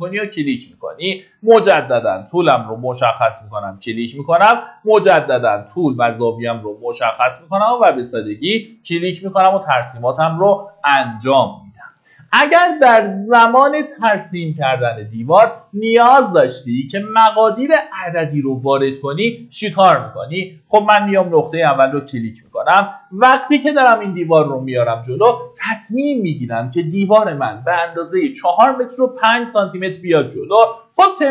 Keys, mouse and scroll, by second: 11.6 Escape, 13.1 middle click, 20.9 click.